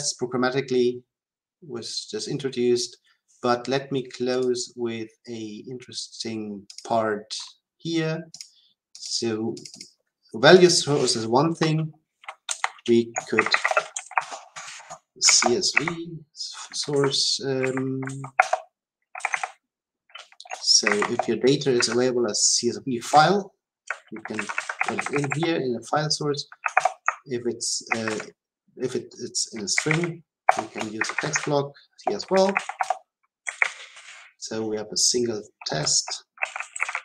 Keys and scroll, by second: 18.3 Return, 19.1 Delete, 24.8 Delete, 26.7 Delete, 30.4 Return.